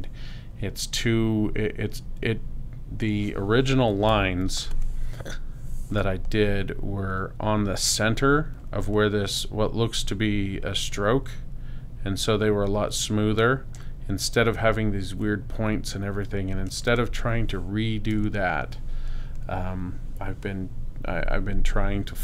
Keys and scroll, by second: 4.4 super+space, 17.0 space.